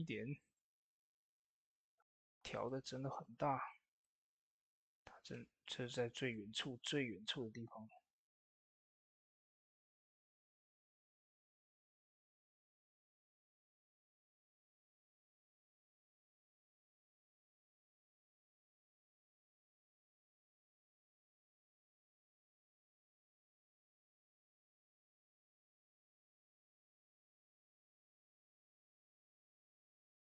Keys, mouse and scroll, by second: 1.4 s, 2.4 click, 2.8 ctrl+a, 3.1-20.2 drag, 14.2 typing, 20.6 Tab, 21.0-24.0 drag, 24.0 Tab, 24.8-30.2 drag.